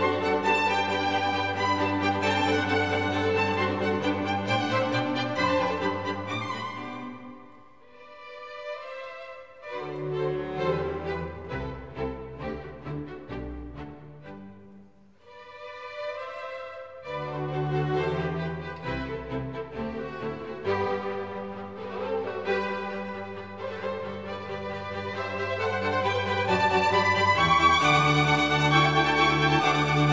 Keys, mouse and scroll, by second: 0.2 n, 3.3-4.8 drag, 5.1 n, 9.7 shift+a, 11.9 s, 14.9 click, 15.3 s, 17.9 click, 18.4 click, 18.5 s, 20.2 r, 24.1 s, 29.8 Tab.